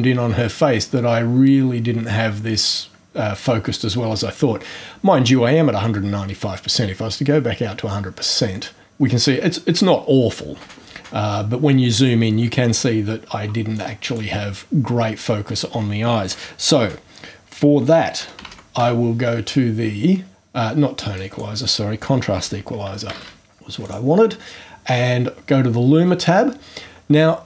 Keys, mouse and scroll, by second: 2.5 scroll down 1, 6.1 scroll down 2, 6.8 scroll down 2, 7.2-7.9 scroll up 4, 13.7 click, 17.9-19.3 typing, 21.1 click, 22.8-23.6 typing, 23.8 click.